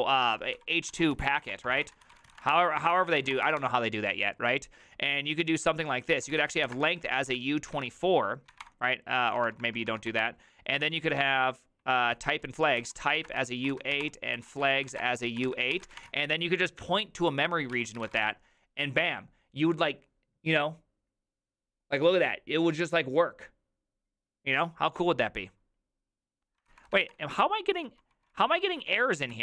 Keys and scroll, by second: 0.0-4.0 typing, 6.0-10.7 typing, 12.2 alt+{, 12.6-18.3 typing, 26.7 ctrl+c, 26.7-29.2 typing, 29.3 ctrl+w.